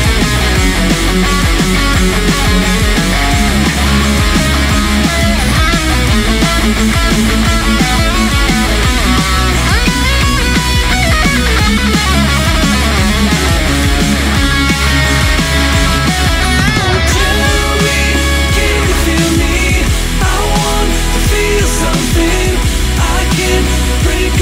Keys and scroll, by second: 0.3 ctrl+z, 8.3-9.0 scroll up 1, 9.3 scroll up 1, 10.1 ctrl+z, 10.3 scroll up 1, 12.4 ctrl+z, 12.7 ctrl+z, 13.3-15.9 scroll up 1, 15.9 ctrl+z, 16.9 ctrl+z, 17.1-17.4 scroll down 2, 17.2 ctrl+z, 17.4 ctrl+z, 18.4 ctrl+z, 18.8-19.2 scroll down 2, 22.2 ctrl+z, 23.6 scroll up 1, 23.7 scroll down 1.